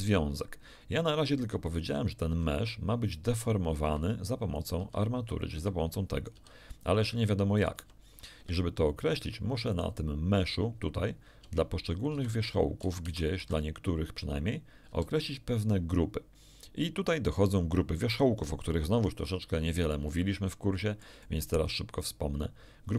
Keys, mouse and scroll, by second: 2.2 g, 3.8 Escape, 4.5 click, 4.8 g, 5.5 Escape, 6.1 click, 6.3 g, 7.0 Escape, 7.5 right click, 7.7 g, 8.3 Escape, 9.6 right click, 11.4 Tab, 12.1 z, 12.5 middle click, 12.8 a, 13.0 z, 13.4 a, 14.8 a, 20.1-22.9 middle drag.